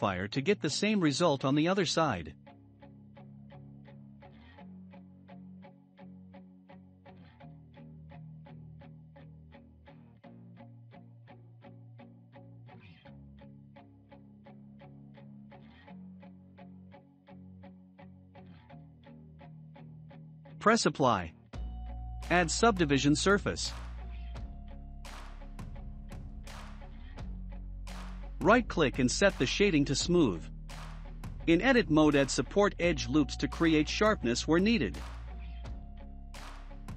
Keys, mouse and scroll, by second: 0.6 click, 1.8-10.3 drag, 12.5 click, 13.2 click, 13.8 click, 14.7 click, 16.0-18.2 shift+middle drag, 18.2 scroll down 1, 18.5-22.5 shift+middle drag, 22.5-27.9 drag, 27.9-30.3 right drag, 30.3-32.3 middle drag, 32.3 Tab, 32.8 scroll up 1, 33.3-36.9 shift+middle drag.